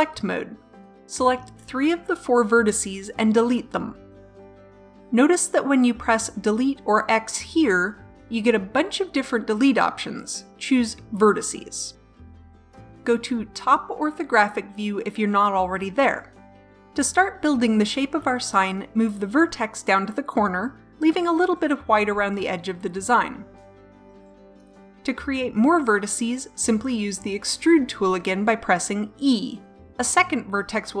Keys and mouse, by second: 5.3 Delete, 18.1 middle click, 20.5 g, 25.1 middle click, 29.8 e.